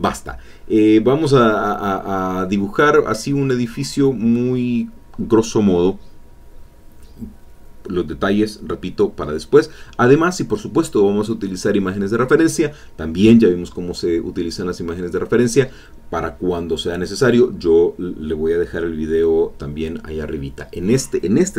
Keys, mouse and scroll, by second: 2.6-3.7 drag, 5.3 click, 5.9-8.0 drag, 10.7 click, 11.1 click, 12.2-13.6 drag, 13.7 click, 15.0 click, 16.1 click, 17.1 click, 18.2 click, 20.7 click.